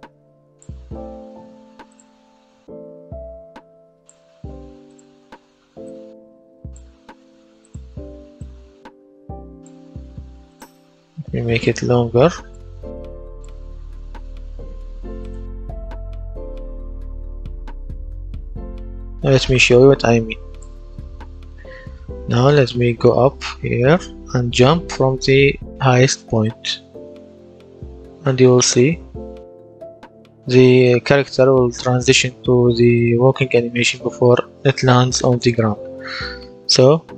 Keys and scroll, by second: 20.9 a, 21.2 w, 27.5 space, 29.9 a, 30.2 w, 35.7 a.